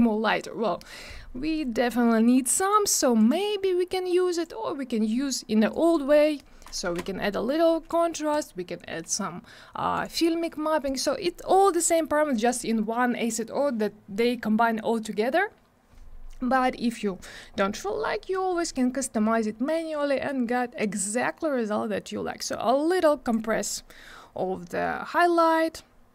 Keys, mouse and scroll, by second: 2.6 click, 3.2 click, 4.3 click, 5.7 click, 6.9 2, 7.0 Return, 8.3 click, 9.9 click, 10.8 click, 20.3 click, 22.4 click, 25.7 click.